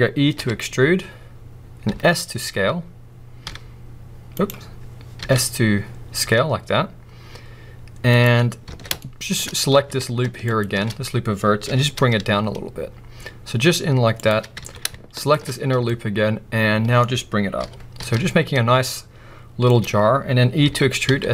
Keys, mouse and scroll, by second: 0.9 e, 4.5 right click, 5.2 s, 8.1 click, 8.6 alt+a, 9.0 middle click, 9.5-10.5 scroll up 2, 10.5 alt+shift+click, 11.7 g, 14.2 click, 14.6 alt+a, 15.2 alt+shift+click, 15.5-15.9 scroll down 2, 15.9-19.7 middle drag, 17.7 g, 19.8 click, 21.2 e.